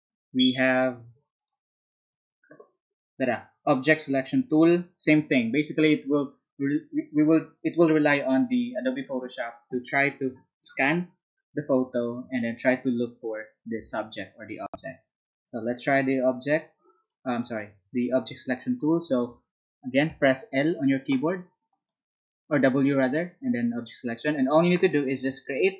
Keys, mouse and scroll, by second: 21.7 ctrl+right click.